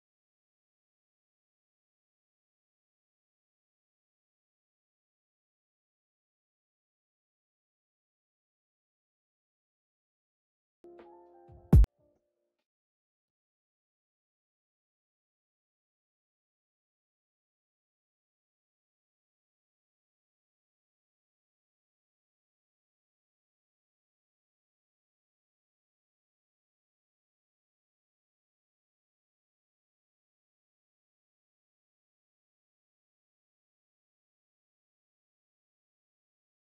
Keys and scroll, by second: 15.7 ctrl+c, 18.6 ctrl+v, 19.3 ctrl+s, 19.9 space, 24.1 ctrl+s, 27.0 ctrl+s, 32.2 alt+x.